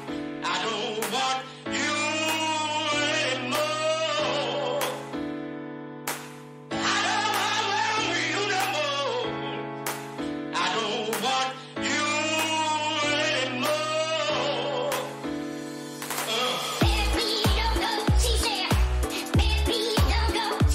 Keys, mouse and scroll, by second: 1.0 Tab, 1.5-4.2 middle drag, 9.0-12.3 middle drag, 12.3-14.4 right drag, 13.0-14.4 drag, 15.0-20.7 middle drag.